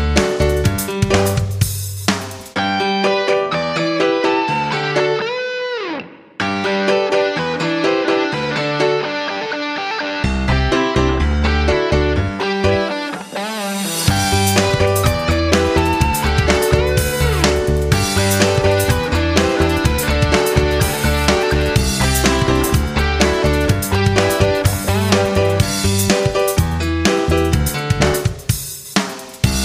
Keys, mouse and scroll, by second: 7.1 F9, 9.2 click.